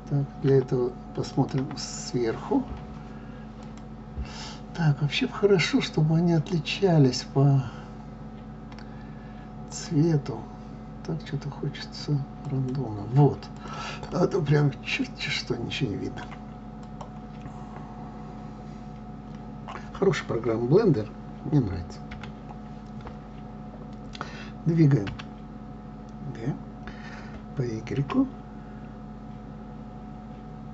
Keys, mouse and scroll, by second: 1.3 click, 1.6 KP_7, 3.5 click, 9.7-13.8 drag, 14.1-16.9 middle drag, 16.9 click, 22.1 KP_7, 25.0 g.